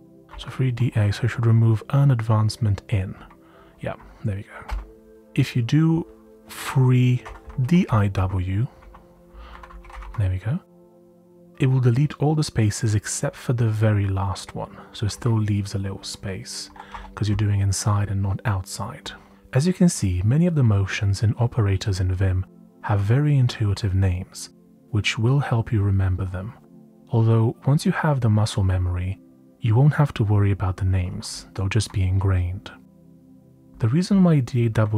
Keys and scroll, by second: 0.0-1.3 typing, 3.1 typing, 4.6 typing, 6.9-10.5 typing, 16.6-17.4 typing, 19.4 typing, 30.8-31.8 typing, 33.5-34.9 typing.